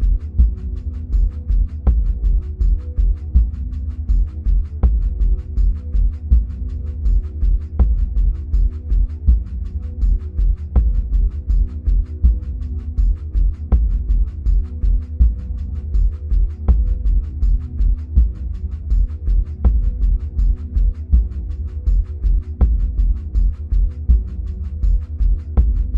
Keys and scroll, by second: 24.6 ctrl+[.